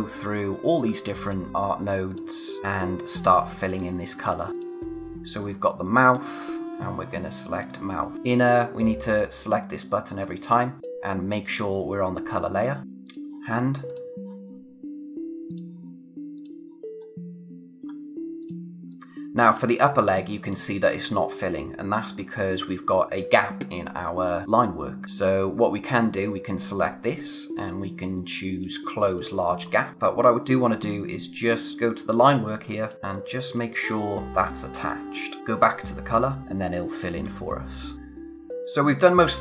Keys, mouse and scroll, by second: 1.3 click, 2.6-3.1 scroll down 1, 3.1 space, 3.5 click, 3.6 space, 4.4 scroll up 1, 4.5 click, 10.1 click, 13.0 click, 17.8-18.4 scroll up 1, 18.4 click, 19.2 space, 19.9-20.4 scroll up 1, 20.4 click, 21.2-23.1 scroll down 1, 29.9-30.4 scroll up 1, 30.4 click, 34.3-34.9 scroll down 1, 34.9 space, 35.1 click, 36.4 scroll down 1, 36.5 space, 36.7 click, 37.0 space, 38.2-39.0 scroll up 1.